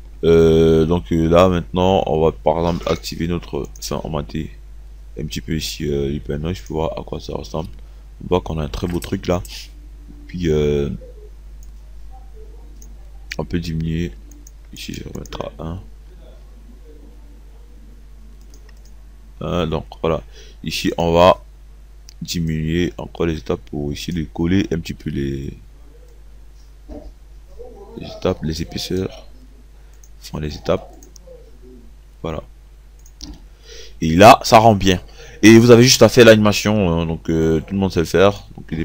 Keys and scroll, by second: 15.1 0, 18.8 KP_1.